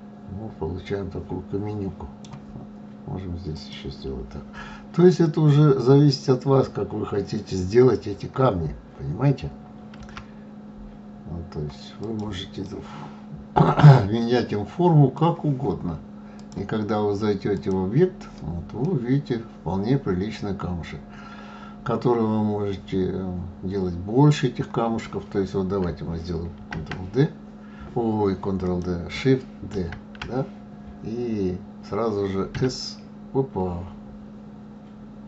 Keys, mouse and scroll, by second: 3.5 click, 10.0 g, 12.6-15.6 middle drag, 16.4-18.8 drag, 18.8-21.8 middle drag, 26.5 shift+d, 28.6 click, 29.7 shift+d.